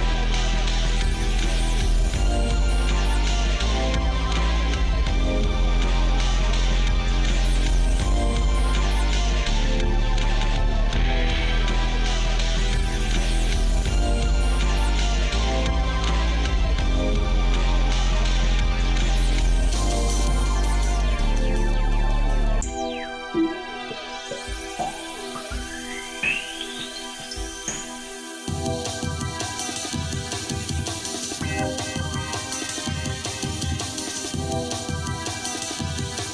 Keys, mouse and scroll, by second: 2.2 click, 4.7 shift+d, 7.3 ctrl+z, 8.1 ctrl+z, 9.2 shift+middle click, 9.8 middle click, 10.5 shift+middle click, 12.1 shift+middle click, 12.6 middle click, 13.2 middle click, 13.8 shift+middle click, 14.9 ctrl+z, 15.5 ctrl+z, 15.7 ctrl+z, 17.4 click, 18.6 shift+middle click, 19.8 scroll down 1, 19.9 scroll up 1, 20.4-20.9 scroll down 1, 21.6 shift+d, 23.6 shift+middle click, 24.2-24.9 scroll up 3, 25.6 g, 31.4-32.8 shift+middle drag, 34.0 shift+d.